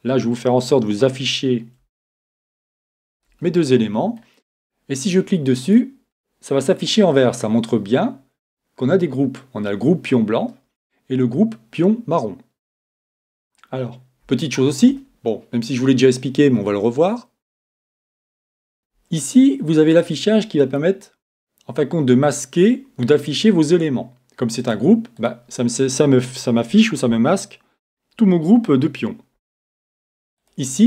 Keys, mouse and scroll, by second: 2.1-4.8 drag, 3.7-5.5 middle drag, 5.7-7.5 drag, 7.2 middle click, 7.5-9.2 middle drag, 14.4-16.2 middle drag, 20.2 click, 24.6-27.0 drag, 30.4 click.